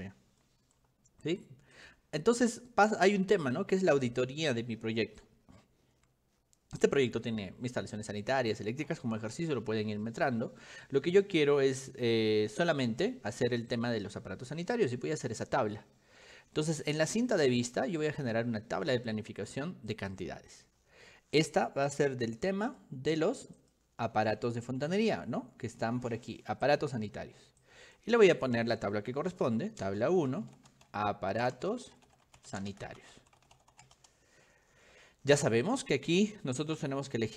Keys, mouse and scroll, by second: 0.2 middle click, 0.5 middle click, 0.6 click, 0.7-1.1 scroll up 3, 0.8 click, 1.1 middle click, 1.8 click, 3.4 click, 4.1 click, 5.2 middle click, 5.2-5.9 scroll up 2, 8.1 shift+middle click, 16.9 click, 18.1 click, 20.0 click, 22.7 click, 23.6 click, 24.4 click, 24.9 click, 26.7 click, 27.7 click, 29.1-34.4 typing, 35.7 click.